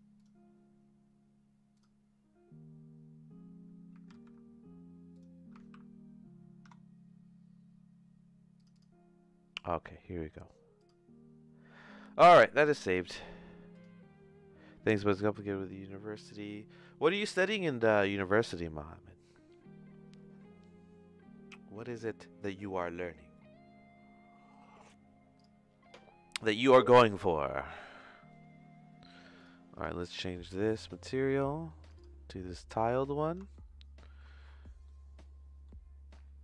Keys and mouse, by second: 25.3 click, 27.5 middle click, 29.3 click, 33.5 shift+middle click, 34.9 middle click.